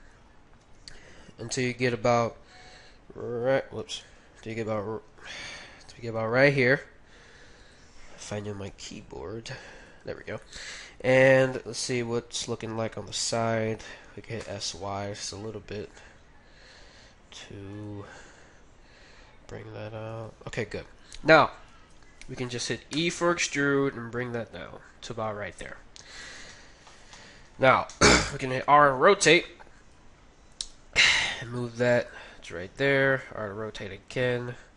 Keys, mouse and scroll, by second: 0.6 z, 0.9-3.5 middle drag, 2.8 a, 3.9 ctrl+z, 4.5 a, 5.5 ctrl+z, 6.0 s, 8.6 g, 9.8 g, 10.4-12.3 middle drag, 11.5 KP_3, 14.4 s, 18.1 g, 20.1 g, 21.7 KP_1, 22.9 e, 26.2 KP_3, 28.8 r, 29.9 r, 30.7 g, 32.0 g, 32.6 r.